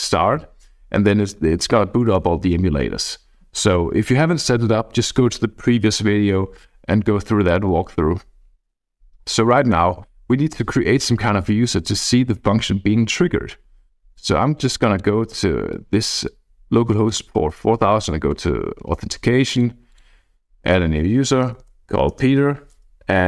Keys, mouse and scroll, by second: 0.4-4.4 scroll down 1, 11.1-14.6 drag, 14.9 click, 15.7 click, 21.1-22.1 typing.